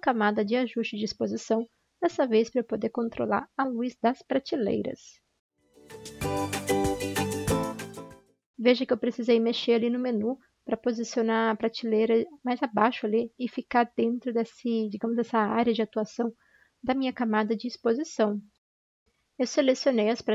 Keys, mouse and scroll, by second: 18.5 ctrl+shift+i.